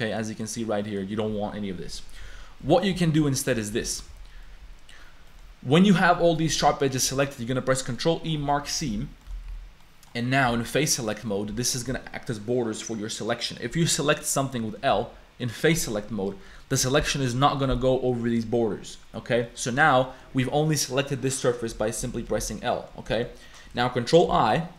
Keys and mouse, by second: 0.6 shift+click, 2.2 ctrl+z, 2.9 1, 3.3 shift+click, 3.9 ctrl+z, 4.1 2, 5.3 click, 6.3 click, 7.1 ctrl+e, 8.6 3, 8.9 a, 9.2 click, 9.8 click, 9.8 a, 10.7 click, 14.9 l, 16.3 click, 16.9 click, 19.4 click, 20.1 click, 21.7 a, 22.4 l, 22.7 click, 23.1 shift+click, 23.4 click, 24.3 ctrl+i.